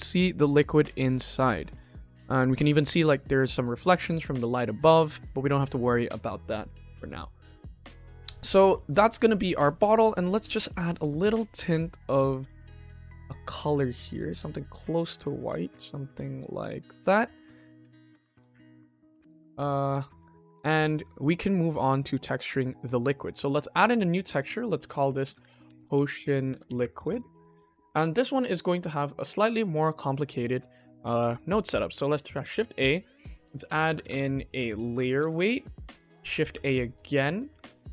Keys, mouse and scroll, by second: 0.3 middle click, 1.2-1.6 shift+middle drag, 1.8 ctrl+middle click, 3.5 ctrl+s, 4.2 click, 4.9 click, 5.2 click, 9.2 click, 17.3 click, 17.9 click, 19.9 click, 21.8 click, 22.1 click, 23.3 drag, 23.9-26.2 drag, 26.5-27.6 drag, 27.0 BackSpace, 28.6 shift+middle click, 30.0-30.6 middle drag, 31.1 click, 32.3 shift+a, 33.5 o, 33.9 BackSpace, 34.0 BackSpace, 37.3 click, 37.4 shift+a.